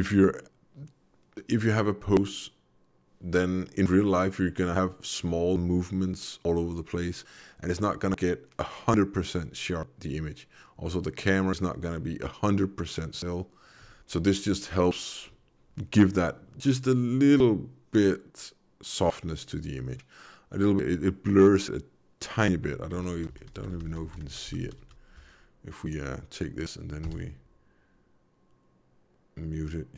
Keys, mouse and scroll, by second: 22.9 v, 23.1 v, 25.8 click, 27.0 m.